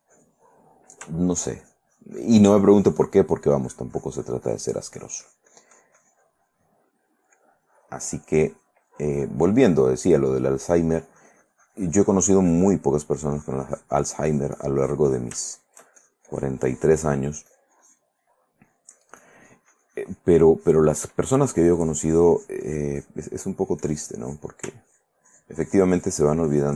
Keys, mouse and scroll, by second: 0.9 middle click, 1.8-7.4 shift+drag, 7.5-10.2 drag, 10.3 middle click, 12.1 click, 13.1 middle click, 13.4 click, 13.5-15.6 drag, 15.7 shift+middle click, 16.2-17.5 shift+drag, 17.7 shift+click, 18.5 shift+middle click, 18.9-23.4 shift+drag, 23.6 middle click, 24.0 click, 25.0 ctrl+click, 25.5-26.7 ctrl+drag.